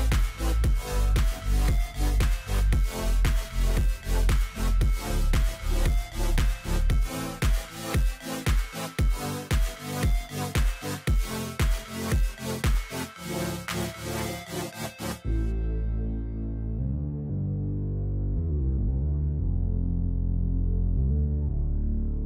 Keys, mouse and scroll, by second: 2.9-3.9 scroll down 5, 5.0-5.5 scroll, 5.6 shift+click, 10.0-11.6 shift+drag.